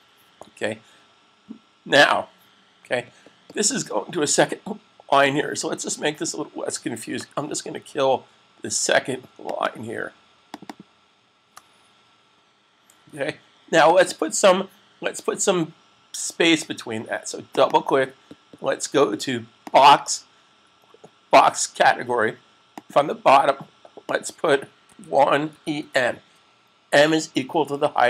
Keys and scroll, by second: 12.9 super+s, 24.9-26.1 typing.